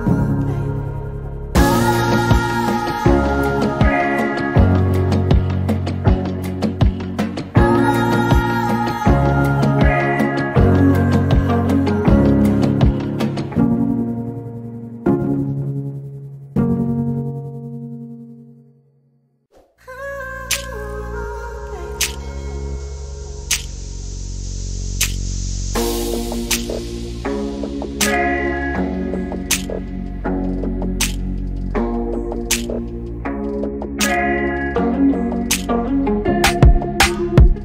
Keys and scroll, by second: 1.1 r, 5.5-6.9 typing, 9.9 m, 15.6 /, 17.5 typing, 21.4 Delete, 22.3-24.6 typing, 27.9 r, 29.6 p, 33.1-34.5 typing.